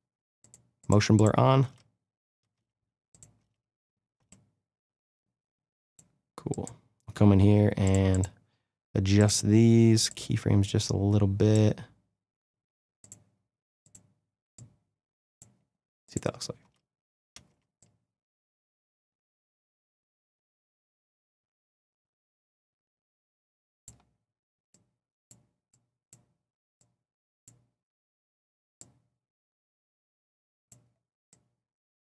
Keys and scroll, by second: 1.6 space, 16.6 space.